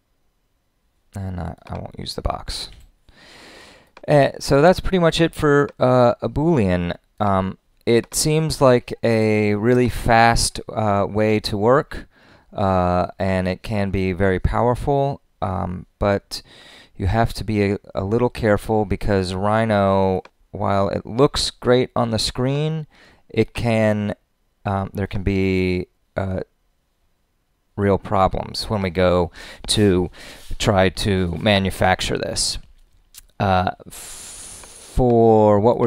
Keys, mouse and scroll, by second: 1.6 click.